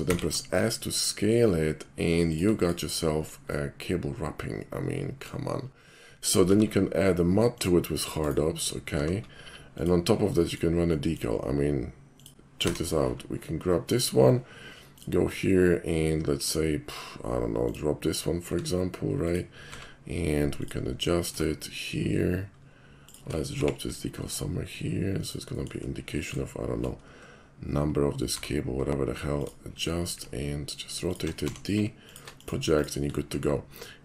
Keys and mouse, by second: 0.1 s, 2.3 shift+click, 2.6 shift+click, 3.3 shift+middle click, 3.5-5.2 shift+middle drag, 5.8 middle drag, 6.5 alt+m, 7.6 click, 9.0 alt+m, 9.8 click, 10.4 middle click, 10.9 middle drag, 12.1 click, 12.7 d, 15.0 click, 17.6 click, 18.5 s, 19.3 click, 19.7 d, 20.6 click, 20.8 middle click, 21.5 ctrl+shift+middle click, 21.7 ctrl+shift+middle click, 22.1 ctrl+shift+middle click, 22.3 ctrl+shift+middle click, 22.6 ctrl+shift+middle click, 23.1 ctrl+shift+click, 23.6 g, 25.2 shift+click, 25.5 shift+middle click, 26.0-26.4 shift+middle drag, 28.3 d, 29.4 click, 30.4 shift+super+middle click, 31.1 shift+super+click, 31.4 d, 32.1 alt+click, 32.4 alt+click, 32.8 alt+click, 33.9-34.0 alt+middle drag.